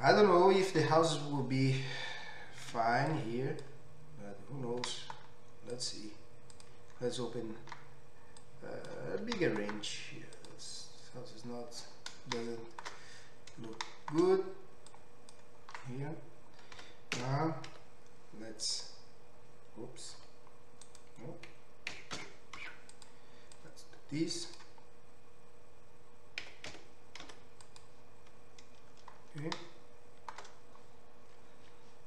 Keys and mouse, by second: 0.4-3.6 drag, 0.4-5.9 middle drag, 0.4-3.6 right drag, 2.7 1, 5.0 g, 5.9 right click, 6.6 middle click, 9.2 g, 10.2 click, 10.2-18.8 middle drag, 10.2-12.4 right drag, 14.9 click, 14.9 right click, 16.8 s, 18.8-23.1 drag, 20.2 r, 21.9 s, 23.1 middle click, 23.6-27.8 drag, 26.4 s, 27.8-32.0 middle drag.